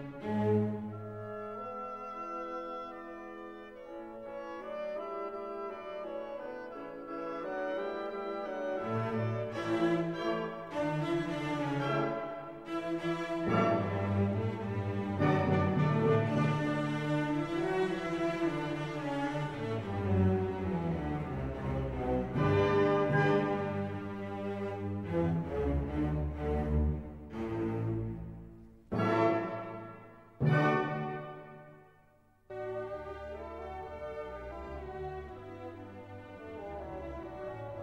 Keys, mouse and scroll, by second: 1.2 drag, 2.3 click, 3.4-5.4 drag, 5.5-8.7 drag, 10.6 click, 10.8 click, 14.6-16.8 drag, 17.3 drag, 18.7 click, 21.9 BackSpace, 24.7 click, 26.3 click, 27.7-30.7 drag, 31.2-34.6 drag.